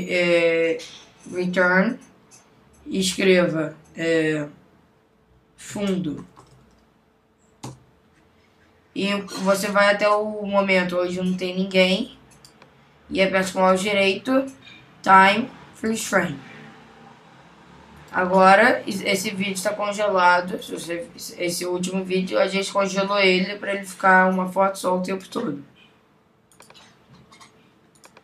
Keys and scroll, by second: 5.7 shift+f, 7.6 Return.